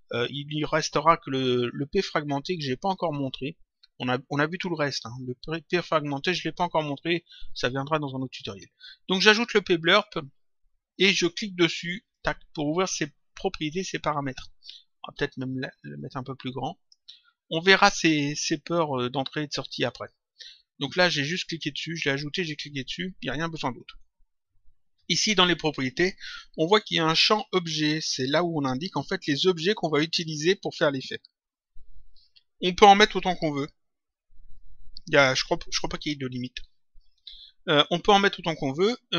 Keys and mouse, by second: 9.9 click, 12.0 click, 15.7 click, 17.6 click, 21.0 click.